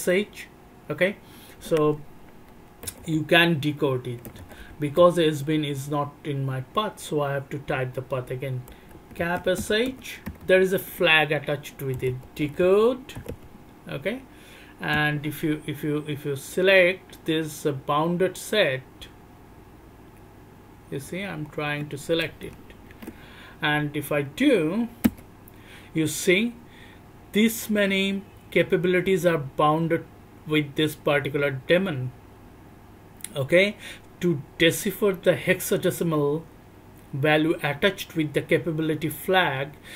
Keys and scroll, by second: 2.8-10.4 typing, 11.9 /, 12.0 /, 12.4 /, 12.6 /, 14.9 /, 25.0 Return.